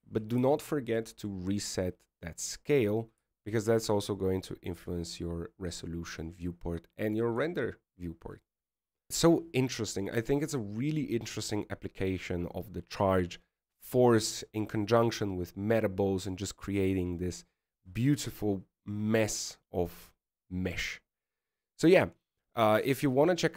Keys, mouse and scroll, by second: 2.5 ctrl+a, 5.3 click, 9.1 KP_1.